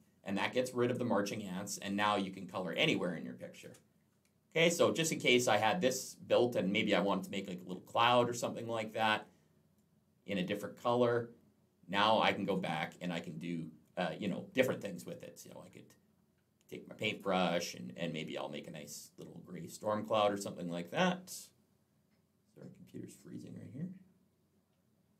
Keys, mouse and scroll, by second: 1.7 click, 2.2 click, 3.5 ctrl+z, 8.7 click, 9.6 click, 17.1 click.